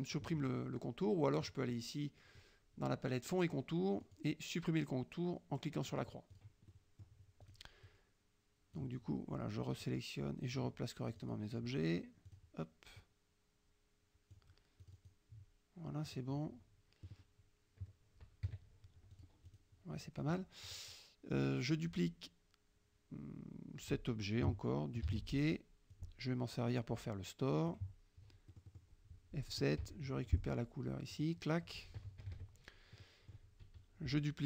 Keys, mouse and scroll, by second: 1.5 click, 4.1 click, 6.0 click, 6.4 click, 6.7 middle click, 6.7-7.5 scroll up 1, 7.5 click, 7.9-9.0 drag, 9.9-10.8 drag, 11.2 click, 12.4 click, 13.0-14.6 drag, 14.9 click, 16.1 click, 18.5 KP_Subtract, 19.2 click, 19.5 click, 20.0 middle click, 20.7 click, 25.2 ctrl+d, 26.0-27.9 drag, 28.6 click, 29.9 F7, 30.3 click, 31.2 click, 32.3 KP_Subtract, 33.1 click, 33.7 F1.